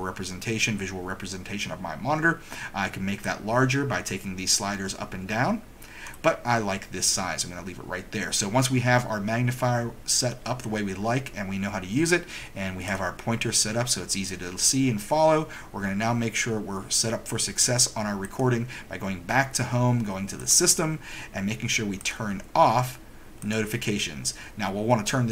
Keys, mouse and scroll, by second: 6.0 right click, 12.9 click, 18.4 click, 20.5 click, 22.1 click, 23.6 click.